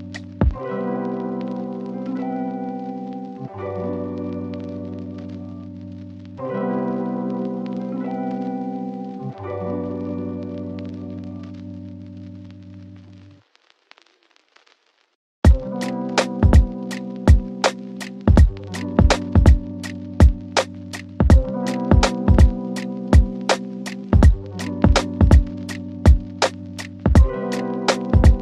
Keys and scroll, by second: 13.2 ctrl+z.